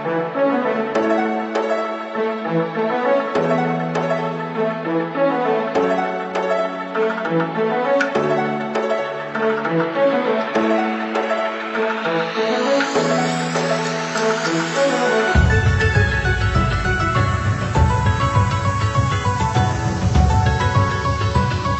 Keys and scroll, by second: 1.6 ctrl+-, 11.7 ctrl+=, 13.3 Right, 13.9 Left, 14.8 ctrl+0.